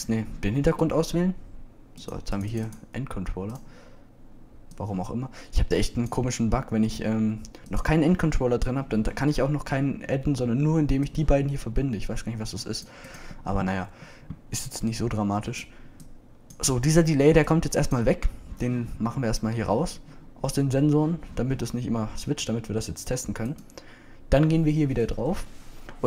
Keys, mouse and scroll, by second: 0.3-0.6 drag, 1.2-2.3 drag.